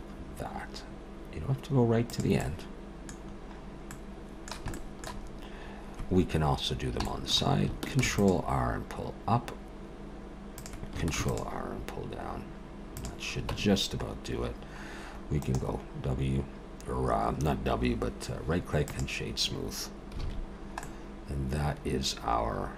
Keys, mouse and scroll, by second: 2.4 middle click, 3.2-3.9 scroll down 1, 3.9 middle click, 3.9-4.7 scroll down 4, 4.7 shift+middle click, 5.2-6.4 scroll up 4, 6.4 scroll up 2, 6.6 scroll down 1, 7.1 shift+middle click, 8.0 ctrl+r, 11.1 ctrl+r, 13.5 Tab, 14.5-15.4 scroll down 1, 15.4 right click, 15.4-16.5 scroll down 3, 20.2 alt+a, 20.5-21.2 scroll down 2, 20.8 middle click.